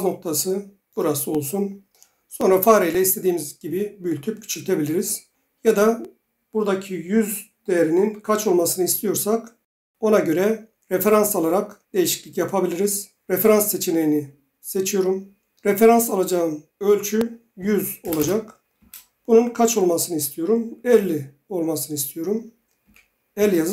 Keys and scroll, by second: 17.3-18.7 typing, 18.8 Return, 22.6-23.3 typing.